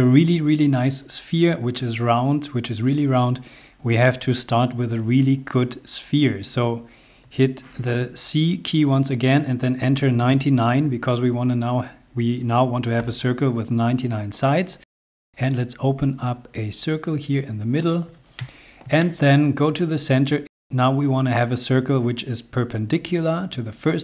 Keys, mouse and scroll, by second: 8.0 c, 10.1 typing, 12.9 Return, 15.4 click, 17.8 click, 19.0 middle click, 19.6 scroll up 1.